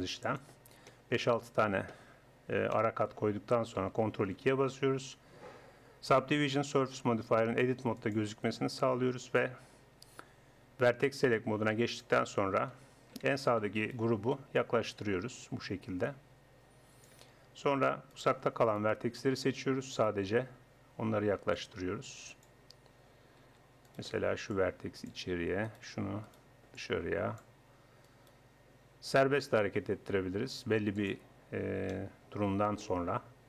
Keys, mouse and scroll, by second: 0.8 click, 4.1 ctrl+2, 8.0-9.5 drag, 9.5 middle click, 11.0-12.8 drag, 12.8 a, 17.4 middle click, 18.2 click, 18.8 shift+right click, 22.4-23.5 drag, 23.9-26.2 right drag, 24.5-26.5 drag, 26.5 right click, 26.8 click, 27.6-28.6 drag, 28.0-29.8 right drag, 31.9-33.4 drag.